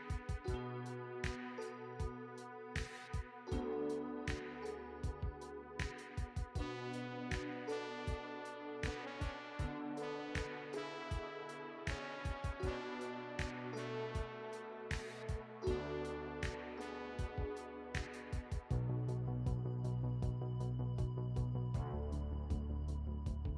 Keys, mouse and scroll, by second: 2.7 click, 8.1 click, 9.1 click, 9.7 click, 11.6 click, 12.5 click, 13.0 click, 13.4 click, 15.0 middle click, 18.5 click, 19.4-19.9 scroll down 1, 19.9 middle click, 20.5-21.1 scroll down 1, 21.4 shift+a.